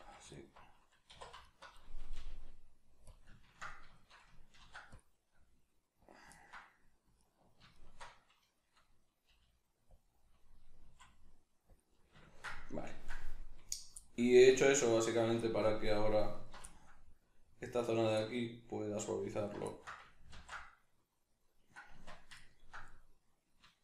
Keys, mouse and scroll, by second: 0.3 alt+right click, 1.1 2, 1.5 alt+right click, 2.2 g, 3.1 click, 3.3 ctrl+middle click, 3.7 middle click, 3.9 shift+middle click, 4.6 ctrl+r, 6.1 click, 6.3 ctrl+middle click, 7.2 alt+right click, 7.7 alt+shift+right click, 8.5 middle click, 9.3 g, 10.1 click, 10.2 middle click, 10.9 s, 11.8-16.3 middle drag, 11.8 click, 16.3 alt+right click, 16.7-17.8 ctrl+middle drag, 17.8 alt+right click, 18.2-19.3 middle drag, 19.3 alt+right click, 19.7-23.8 ctrl+middle drag, 20.3 ctrl+x, 21.9 Tab.